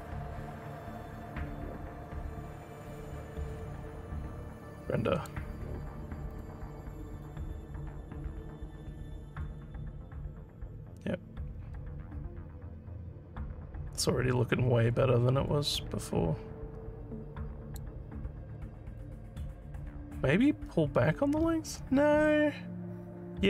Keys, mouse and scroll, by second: 1.3 scroll, 1.9 scroll, 1.9 scroll, 2.4 scroll, 3.0 scroll, 5.2 click, 6.3 click, 7.2 click, 8.9 alt+middle click, 9.6-17.8 alt+drag, 19.0-23.4 alt+drag.